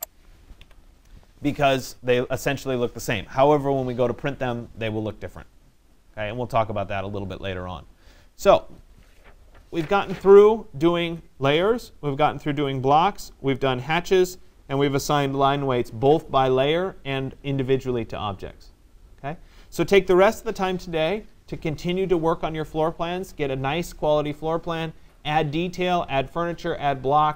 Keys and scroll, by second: 0.7 Escape.